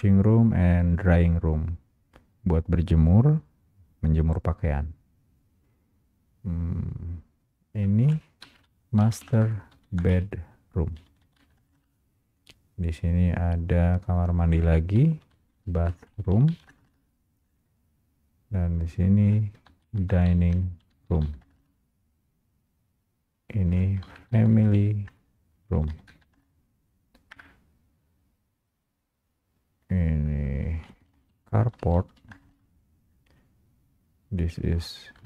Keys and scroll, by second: 9.5 Return, 16.1 Return, 21.5 Return, 26.5 Return, 32.5 Return.